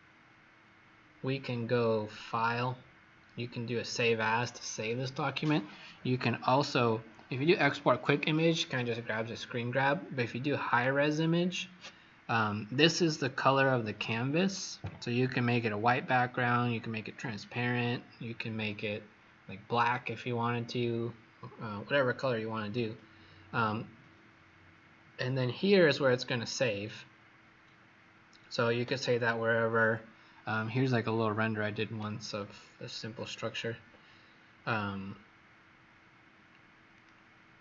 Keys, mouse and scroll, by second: 2.0 click.